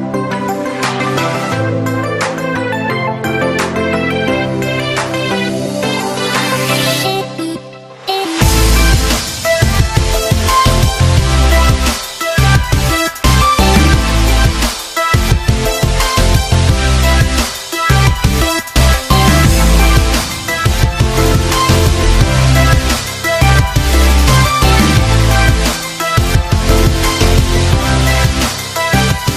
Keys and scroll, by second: 18.4 z.